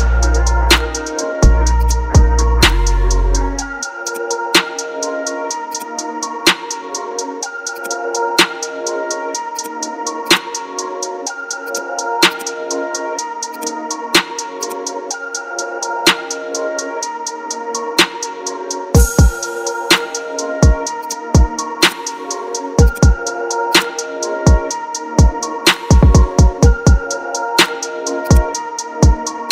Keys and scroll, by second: 0.7 Up, 2.6 ctrl+alt+g, 4.8 ctrl+alt+g, 6.6 ctrl+alt+g, 8.2 ctrl+t, 15.4 Return, 26.1 ctrl+z, 27.1-27.9 typing.